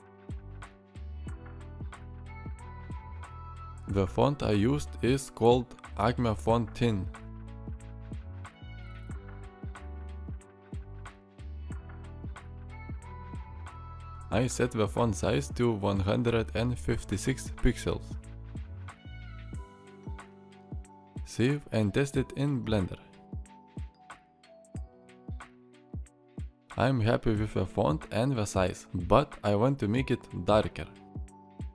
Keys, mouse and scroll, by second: 25.6 alt+r.